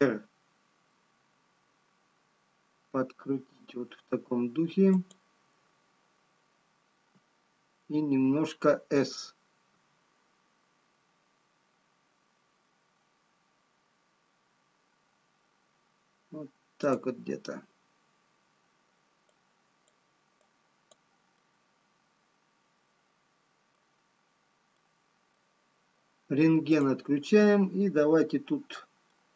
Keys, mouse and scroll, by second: 1.6 r, 9.8 s, 20.0 click, 21.4 click, 22.6 middle click, 24.9 middle click, 24.9 scroll down 1, 28.4 click, 29.2 middle click.